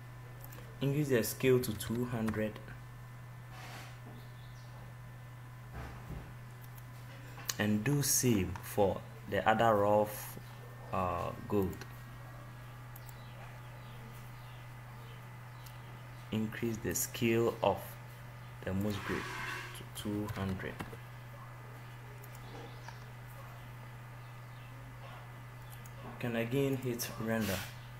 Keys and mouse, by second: 2.9 0, 3.3-8.1 drag, 15.1 click, 15.2 right click, 16.0-27.8 drag, 27.8 0.